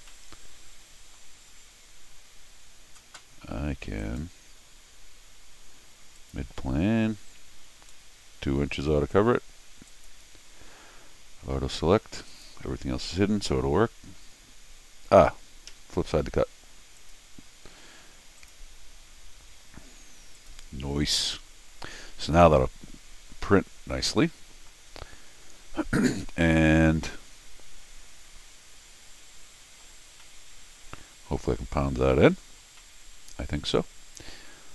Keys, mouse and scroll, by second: 0.1-1.1 middle drag, 4.0 click, 6.2 click, 7.9 2, 9.9 click, 12.3 click, 15.7 Escape, 17.0 click, 18.4 click, 20.3 click, 20.8 scroll down 1, 21.2 middle click, 22.2-24.6 middle drag, 26.2-29.8 middle drag, 30.1-31.4 middle drag, 31.6 middle click, 32.6 middle click.